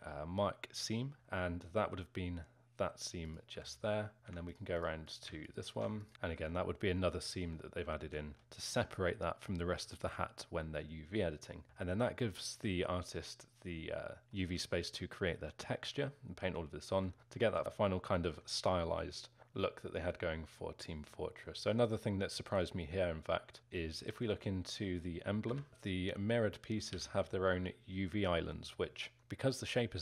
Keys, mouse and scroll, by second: 0.8 ctrl+e, 3.3 click, 6.1-17.6 alt+middle drag, 17.6 z, 18.1-24.3 alt+middle drag, 24.3 k, 25.7 l, 26.9 l.